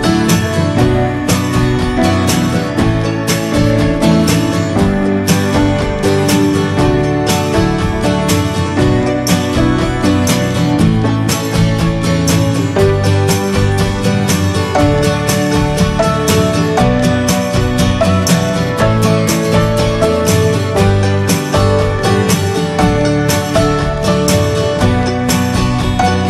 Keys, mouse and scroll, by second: 0.1 scroll up 1, 1.8 ctrl+z, 2.2-3.4 scroll down 1, 3.4-3.8 right drag, 3.8 click, 4.1 click, 4.8 click, 5.2 click, 11.1-12.4 right drag, 12.4 ctrl+z, 15.1 click, 15.5 click, 15.6 l, 17.5 s, 23.9 click.